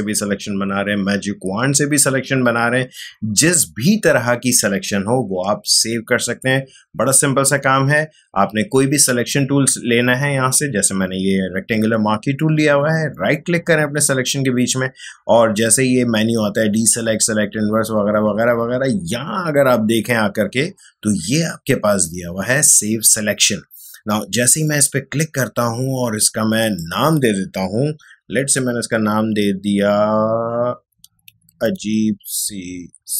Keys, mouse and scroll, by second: 13.1 right click, 24.5 click, 30.5-33.1 typing.